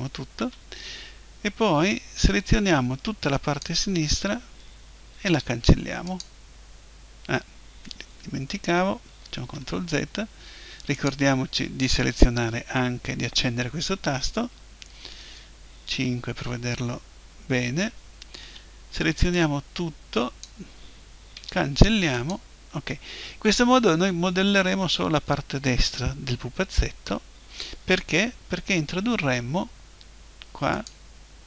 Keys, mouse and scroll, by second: 1.7 b, 5.2 Delete, 9.4 ctrl+z, 11.0 click, 14.0 click, 14.6 middle click, 15.9 KP_5, 18.4-19.4 middle drag, 18.4 b, 21.4 Delete, 30.8-31.4 drag.